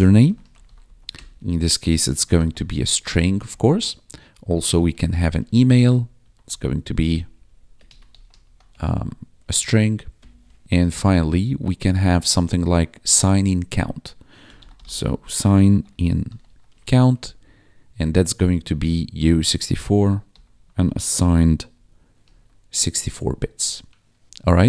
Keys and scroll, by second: 0.0-10.3 typing, 14.1-17.9 typing, 19.1-21.6 typing, 22.2 ctrl+s, 24.2 ctrl+s.